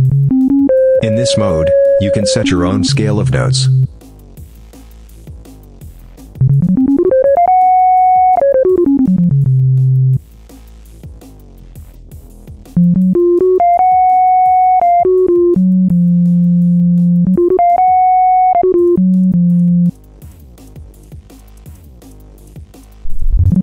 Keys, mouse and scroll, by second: 4.6 click, 5.1 click, 6.2-10.1 drag, 10.7 click, 11.5 click, 12.5-19.9 drag, 20.5-21.4 drag, 21.9-22.6 drag, 22.8-23.6 drag.